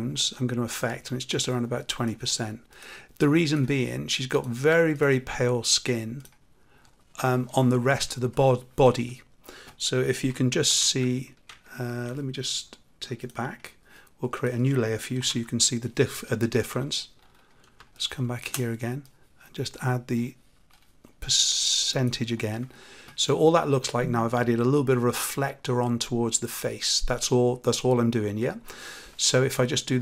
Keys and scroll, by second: 10.7 ctrl+z, 15.1 ctrl+j.